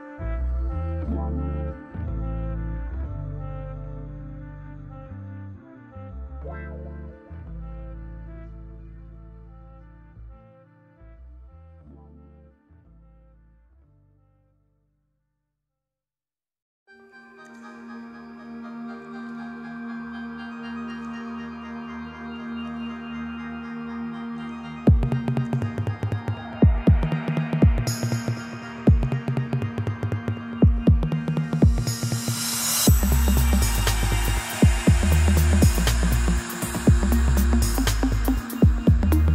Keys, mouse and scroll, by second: 2.0 l, 3.1 o, 4.2 p, 4.5 Tab, 4.5 click, 4.8 g, 5.3-5.6 middle drag, 6.2 alt+middle click, 6.8 g, 7.4-7.7 shift+middle drag, 7.7 g, 8.1 shift+middle click, 8.5 Tab, 8.7 scroll up 1, 8.7-9.2 shift+middle drag, 9.2-10.0 scroll up 5, 10.0 click, 10.1 g, 11.0 click, 11.9 Tab, 12.0-12.5 scroll down 5, 12.5-13.5 shift+middle drag, 13.5 Tab, 13.9-16.5 middle drag, 16.5 Tab, 18.4 click, 18.8 scroll down 1, 19.1-19.8 middle drag, 19.8-20.3 scroll up 5, 20.3 click, 20.5-20.8 shift+middle drag, 20.8 scroll up 1, 21.0-24.0 middle drag, 27.7 click, 28.7-30.1 drag, 30.1-30.7 scroll down 3, 30.7 click, 30.8 middle click, 31.1-31.4 scroll down 2, 31.4-32.4 middle drag, 32.4-32.9 scroll up 5, 32.9-35.7 middle drag, 35.7 click, 36.3-37.4 middle drag, 37.4 click, 37.7-38.1 middle drag, 38.1 click, 38.4 scroll down 5, 38.6-39.3 middle drag.